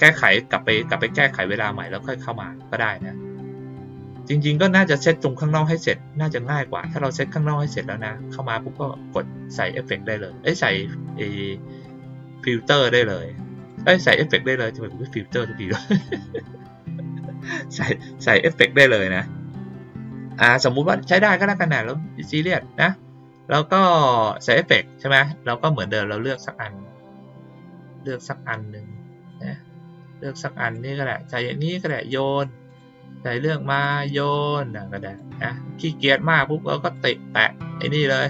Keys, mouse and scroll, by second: 13.5 click, 20.0 click, 21.3 click, 24.2 click, 26.2 click, 30.7-31.8 drag, 32.6 click, 33.7 click, 34.3-35.1 drag, 36.8 click.